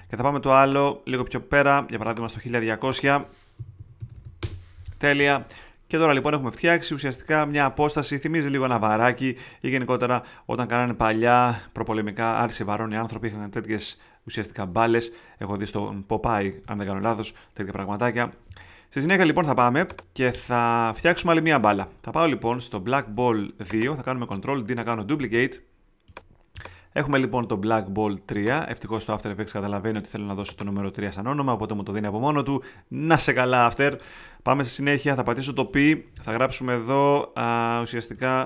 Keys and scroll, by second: 3.3-4.4 typing, 25.1 super+d, 35.8 alt+p.